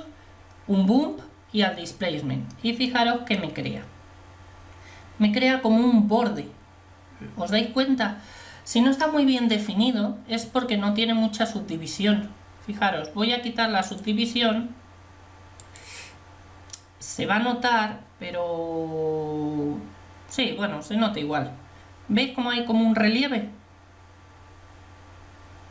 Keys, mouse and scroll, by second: 14.1 click.